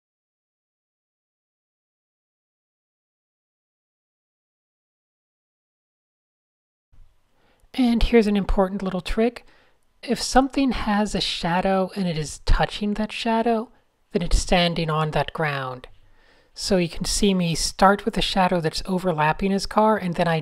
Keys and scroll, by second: 0.1 shift+super+z, 1.0 0, 1.5 shift+super+a, 2.3 Tab, 2.5 Tab, 3.1 Tab, 3.5 Tab, 4.1 Tab, 5.0 Tab, 6.1-6.9 typing, 8.2 a, 10.2 shift+super+a, 10.5 super+-, 10.6 super+-, 10.8-11.2 typing, 15.2 Tab, 16.0 Tab, 17.2 super+z, 17.5-18.6 typing, 19.7 super+a, 19.8 super+Tab.